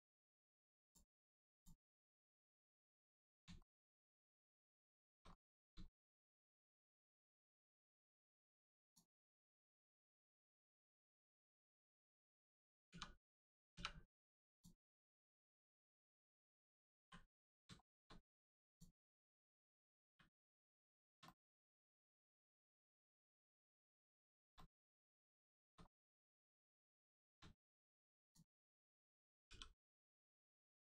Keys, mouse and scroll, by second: 0.1-0.6 scroll down 1, 0.6 Tab, 0.8 click, 1.1 middle click, 1.5 click, 1.8 Tab, 2.3 click, 2.6 scroll down 1, 3.2 middle click, 3.6 shift+middle click, 4.6 scroll up 1, 4.9 shift+middle click, 5.3 scroll up 1, 5.9 shift+middle click, 8.0-8.6 scroll up 1, 8.8 click, 9.8 shift+middle click, 10.4 middle click, 10.4 middle click, 10.5-11.0 scroll down 1, 11.2 shift+middle click, 12.9 middle click, 13.7 3, 14.5 click, 15.3 middle click, 17.0 l, 18.7 click, 20.0 typing, 21.0 shift+middle click, 21.2 middle click, 22.0 shift+middle click, 22.6 middle click, 23.8 scroll up 1, 24.2 shift+middle click, 24.6 middle click, 24.6 middle click, 25.1 scroll up 1, 25.4 shift+middle click, 25.8 scroll up 1, 27.1 shift+middle click, 27.6 right click, 28.2 click, 29.5 r.